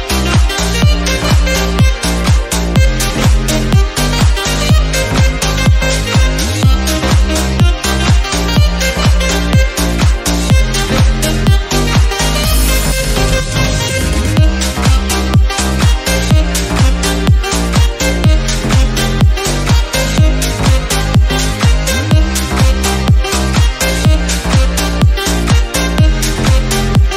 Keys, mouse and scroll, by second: 1.0 scroll down 2, 1.1 middle click, 1.8 scroll up 1, 2.0 shift+middle click, 2.4 click, 3.6 click, 4.1 shift+middle click, 4.8-6.0 shift+drag, 6.4 click, 6.8 middle click, 7.0 scroll down 1, 7.2 shift+middle click, 7.4-7.8 scroll up 1, 7.8 shift+middle click, 8.1-10.2 shift+drag, 10.2 middle click, 10.8-12.7 shift+drag, 12.7 middle click, 13.3 shift+click, 14.8-15.8 shift+drag, 15.8-16.1 scroll down 1, 16.1 scroll up 2, 16.4 shift+middle click, 16.8-18.6 shift+drag, 18.6 scroll down 1, 18.8 middle click, 19.4 Tab, 20.0 click, 20.4 middle click, 20.8 click, 21.0-22.4 middle drag, 22.6 click, 22.9 middle click, 23.1-23.5 scroll up 1, 23.5 Tab, 23.9 middle click, 24.7-25.9 drag, 25.9 middle click, 26.4-27.1 shift+drag.